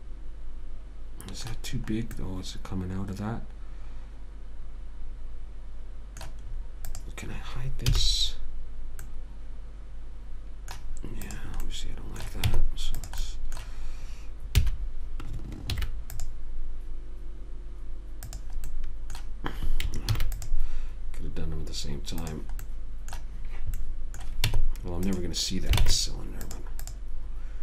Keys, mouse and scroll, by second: 2.1-4.4 middle drag, 6.8 middle click, 7.2-9.1 right drag, 8.2 h, 9.4 middle click, 9.6 middle click, 9.9 middle click, 11.6 click, 12.0 middle click, 12.8 Tab, 14.9 a, 16.1 ctrl+r, 19.0 click, 20.4 ctrl+r, 24.1 middle click, 24.8 Tab, 26.1 ctrl+Tab, 27.1 click.